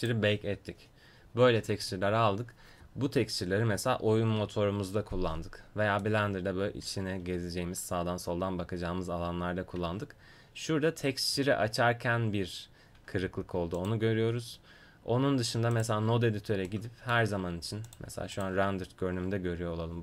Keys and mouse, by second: 6.0-7.6 middle drag, 8.9 middle click, 13.8-20.0 drag.